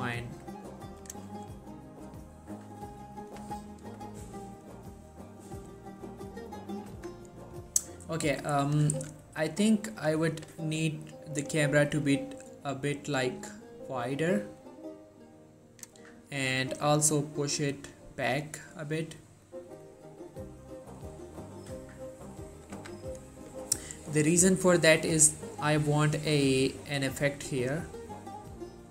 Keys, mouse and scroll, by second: 1.1 right click, 7.1 z, 7.6-8.3 scroll down 1, 8.3-16.2 drag, 21.3-22.1 scroll up 2, 22.8 z.